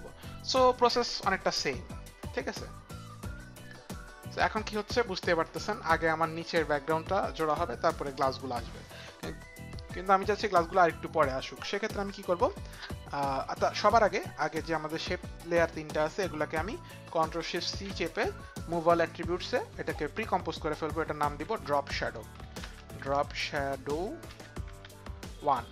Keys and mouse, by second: 2.4 click, 13.6 click, 15.4 shift+click, 17.6 ctrl+shift+c, 21.7-24.3 typing.